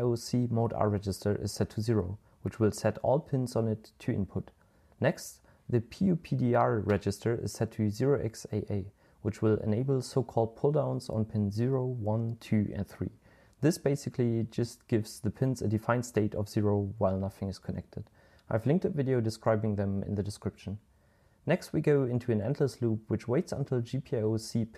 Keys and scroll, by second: 0.0-2.9 typing, 7.9-17.8 typing, 20.3 typing.